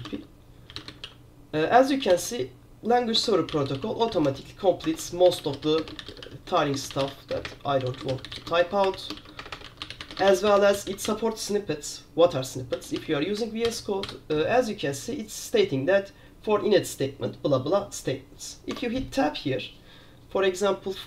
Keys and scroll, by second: 0.0-1.6 typing, 2.2 ctrl+j, 3.3 Tab, 3.3-13.6 typing, 13.8 ctrl+j, 14.1 ctrl+j, 18.8 Tab.